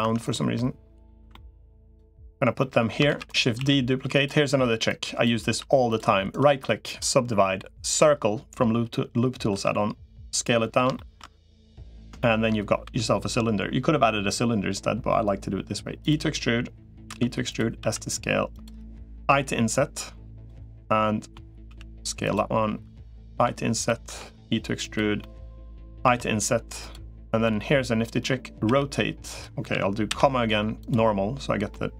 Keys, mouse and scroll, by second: 0.0 click, 0.3 middle click, 1.0 3, 1.1 middle click, 2.4 middle click, 3.0 shift+d, 3.4 s, 4.8 click, 5.4 s, 6.2 right click, 9.4 s, 10.4 middle click, 10.7 shift+middle click, 11.3 middle click, 12.0 shift+middle click, 12.6 e, 17.0 e, 17.6 s, 19.0 i, 20.4 middle click, 21.6 s, 23.2 i, 24.0 e, 25.0 middle click, 25.8 i, 27.2 middle click, 28.4 r, 30.0 ,, 31.5 middle click.